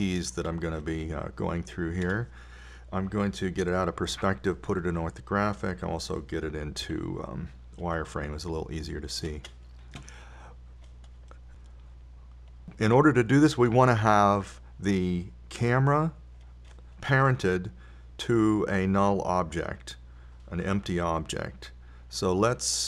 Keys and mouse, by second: 5.5 KP_5, 8.7 z, 13.0-14.5 middle drag, 17.0-18.9 right drag.